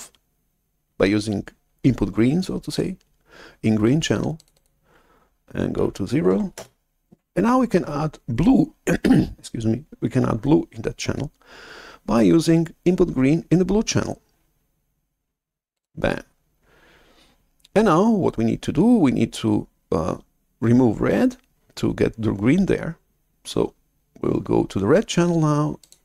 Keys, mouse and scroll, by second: 4.3-6.2 drag, 6.2 0, 6.5 Return, 15.7-18.0 drag, 25.8-26.0 drag.